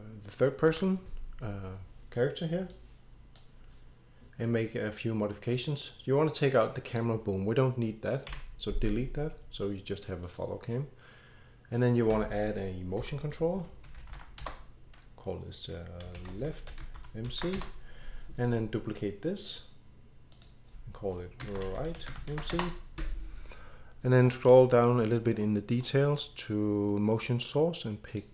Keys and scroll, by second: 0.7 ctrl+e, 8.3 Delete, 12.7-17.8 typing, 21.2-22.8 typing.